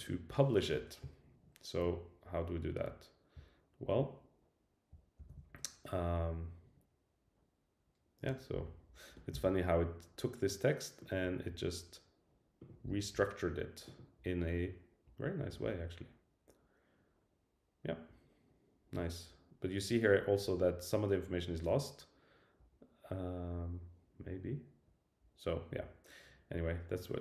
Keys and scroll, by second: 5.2 super+Left.